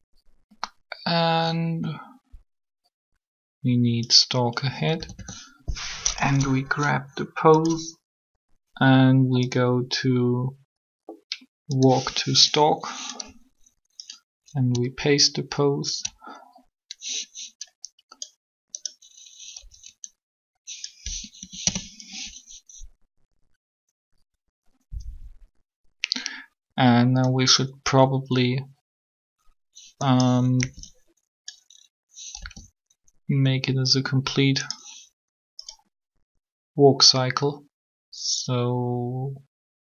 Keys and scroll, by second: 4.9 a, 5.1 a, 19.6 b, 21.4 Delete, 21.6 Return, 30.5 b, 32.4 g.